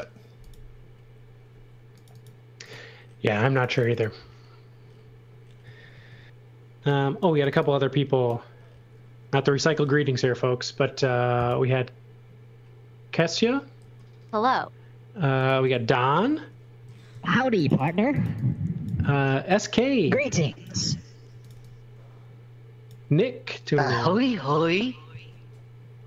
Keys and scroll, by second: 5.5 x, 5.9 space, 7.0-8.0 typing, 9.3 m, 13.7 shift+5, 16.7-19.0 typing, 20.0-21.9 typing.